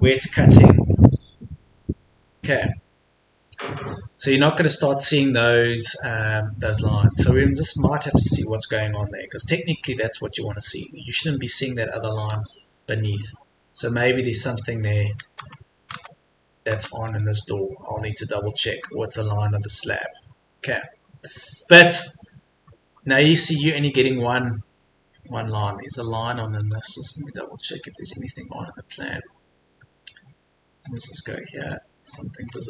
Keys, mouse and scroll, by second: 1.1 click, 2.1 Escape, 2.8-3.1 scroll down 1, 3.1 middle click, 3.9 Escape, 4.1 middle click, 5.4 Escape, 5.7-6.1 scroll up 1, 6.7 click, 7.1 Escape, 7.2-8.0 scroll down 1, 8.0-8.4 scroll up 1, 8.7 Escape, 8.9 scroll up 1, 9.1 Escape, 9.5-10.7 scroll up 1, 10.7 Escape, 11.7 click, 12.3 Escape, 15.4 Tab, 17.1 click, 17.8 Escape, 18.7 scroll down 1, 18.8 Escape, 19.9 click, 20.2 Escape, 20.5-21.1 scroll down 1, 21.1 middle click, 21.6-22.7 scroll up 1, 22.7 middle click, 24.2-24.7 scroll up 1, 26.6 click, 32.1-32.5 scroll up 1.